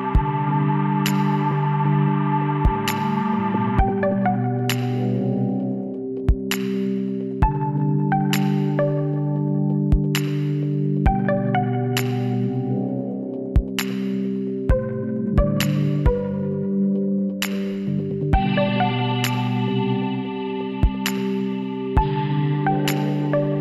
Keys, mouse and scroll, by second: 0.4 ctrl+z, 0.9 middle click, 1.2 click, 2.4 w, 6.7-11.1 middle drag, 10.0 Tab, 12.4-14.4 drag, 13.7 KP_1, 14.7 a, 15.4-16.6 middle drag, 16.6 s, 20.7 Tab, 22.7-23.6 drag.